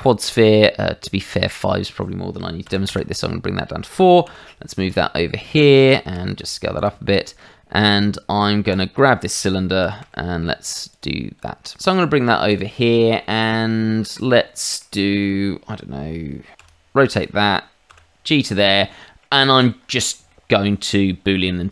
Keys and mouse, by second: 1.5 click, 2.6 KP_4, 2.9 Return, 4.2 g, 4.8 click, 5.9 shift+middle click, 6.4 s, 6.7 click, 7.1 shift+middle click, 8.7 click, 9.0 shift+middle click, 9.8 s, 10.0 z, 10.9 click, 12.5 click, 12.8 middle click, 13.2 shift+middle click, 13.9 middle click, 14.4 shift+middle click, 16.6 r, 17.1 click, 17.9 g, 18.5 click, 18.9 middle click, 19.4 shift+middle click, 20.2 shift+middle click.